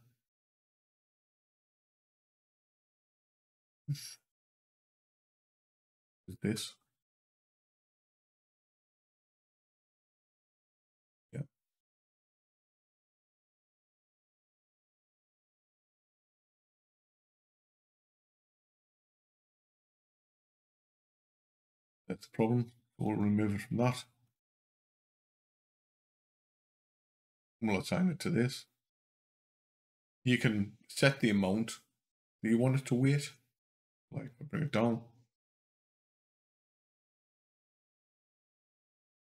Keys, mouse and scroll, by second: 3.1 click, 5.7 click, 7.3 l, 8.6 click, 11.7 click, 12.5 Down, 13.0 Down, 16.5 Up, 17.1 Up, 19.0 Down, 19.3 Down, 22.9 click, 24.1 click, 24.6 Up, 25.1 Up, 26.0 Down, 26.2 Down, 28.4 click, 33.6 click, 34.5 click.